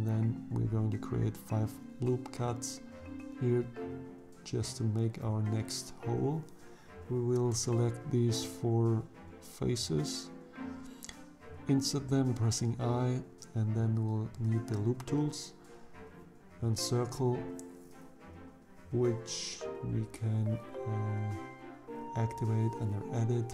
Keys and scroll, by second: 0.1 ctrl+r, 8.5 3, 11.0 i.